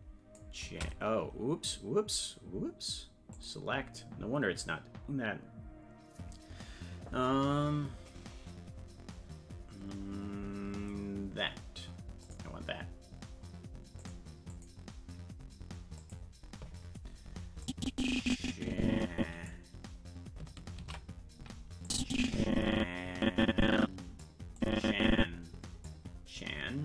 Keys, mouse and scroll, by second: 3.3 click, 12.2 click, 14.0 click, 14.5 click, 16.0 click, 17.6-19.5 drag, 21.2 ctrl+s, 21.9-24.2 drag, 24.6-25.8 drag.